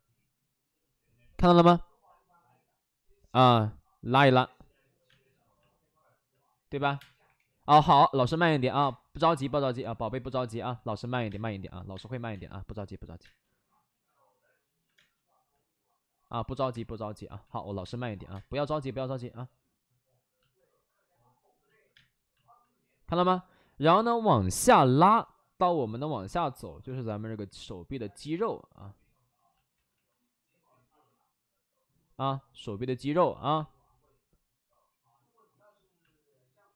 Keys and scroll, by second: 5.0 space, 6.7 3, 6.9 space, 7.2 3, 8.7 space, 10.4 alt+s, 11.0 alt+s, 11.2 space, 11.9 space, 12.2 2, 13.1 space, 14.9 space, 16.6 3, 17.6 ctrl+z, 17.7 space, 18.2 space, 21.9 space, 24.4 alt+s, 26.5 2, 26.8 5, 29.8 ctrl+z.